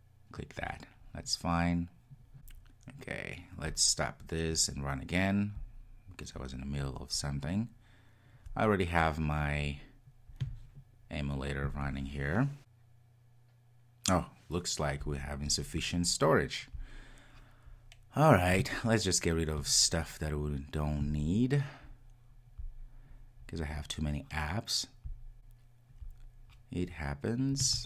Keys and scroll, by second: 3.8 super+F2, 5.5 ctrl+r.